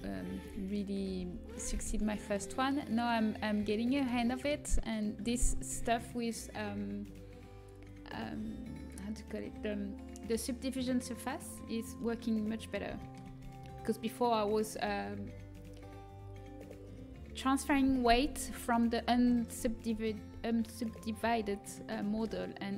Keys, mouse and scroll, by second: 1.1 z, 1.9-4.2 middle drag, 11.8 middle click.